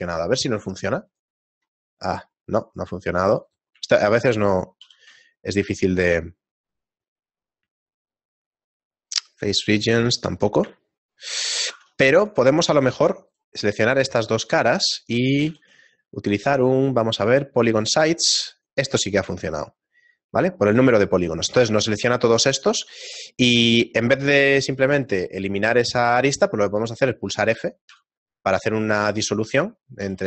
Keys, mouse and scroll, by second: 3.4 right click, 4.8 shift+g, 10.8 shift+middle click, 12.4 ctrl+Tab, 13.3 shift+right click, 13.7 shift+middle click, 15.5 shift+g, 18.6 shift+middle click, 24.2 shift+middle click, 25.6 middle click, 27.9 f, 29.4 right click, 30.0 a.